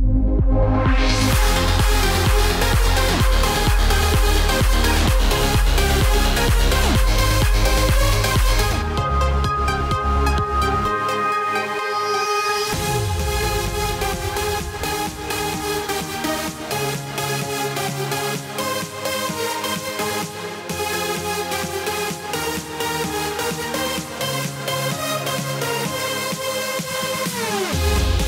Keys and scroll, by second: 2.0 ctrl+d, 24.7 alt+BackSpace, 26.3 ctrl+d.